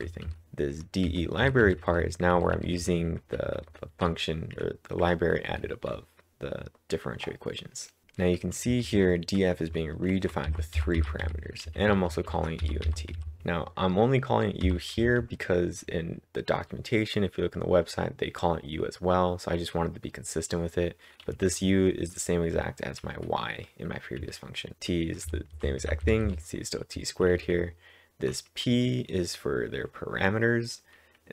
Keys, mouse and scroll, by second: 0.2-0.9 typing, 2.1-4.4 typing, 8.4-9.1 typing, 10.5-12.1 typing, 13.1-13.9 typing, 21.3 typing, 22.6 k, 24.2-25.3 typing, 26.7-28.3 typing.